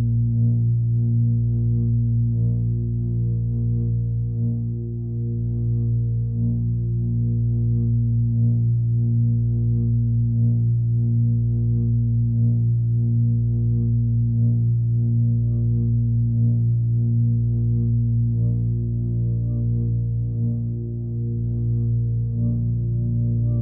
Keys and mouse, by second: 0.4 click, 0.6 click, 0.7 click, 1.3 click, 1.8-2.4 alt+middle drag, 3.8 click, 5.1-6.2 alt+middle drag, 7.2-7.8 drag, 9.0-10.7 shift+drag, 11.1 middle drag, 11.8 g, 13.8 s, 15.7-16.9 alt+middle drag, 17.2 middle drag, 17.8 alt+middle click, 18.7 g, 21.5-22.2 alt+middle drag, 22.4 middle click, 22.9 g.